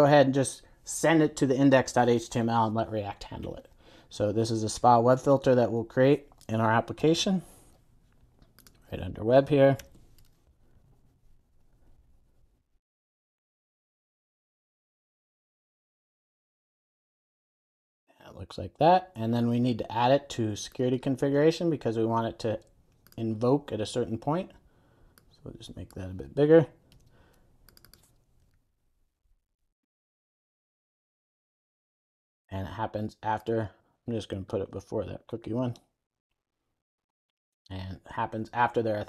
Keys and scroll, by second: 9.9 super+n, 14.2 super+a, 16.5 Return, 17.1 super+s, 27.0 super+d, 30.9 Return, 33.3 super+s, 34.8 super+x, 35.9 super+x, 36.2 super+v, 36.3 super+s.